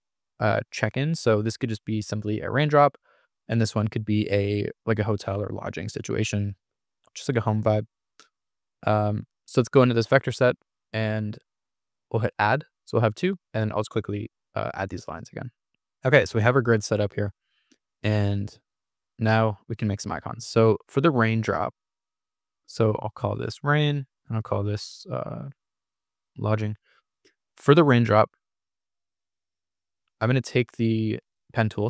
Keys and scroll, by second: 10.3 super+=, 18.3 super+=, 19.2 super+=, 22.8-23.7 typing, 25.3-26.6 typing, 29.8 super+=, 31.3 p.